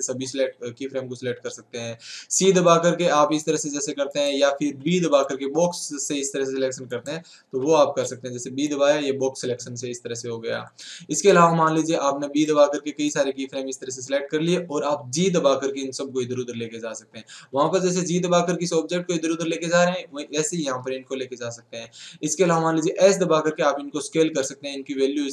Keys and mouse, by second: 15.5 right click, 15.7 g, 18.1 g, 20.1 g, 22.8 s.